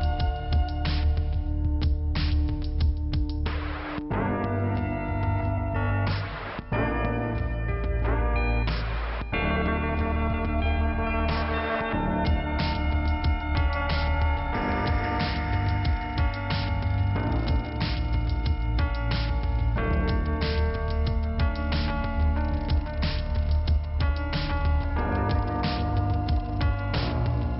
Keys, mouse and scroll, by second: 0.6 click, 0.7 click, 1.3 click, 3.1 f, 4.1 scroll up 2, 8.5 scroll up 2, 9.4 middle click, 10.3 scroll down 1, 13.3 click, 14.4 click, 16.5 click, 17.7 click, 18.4 click, 19.9 click, 23.4 click.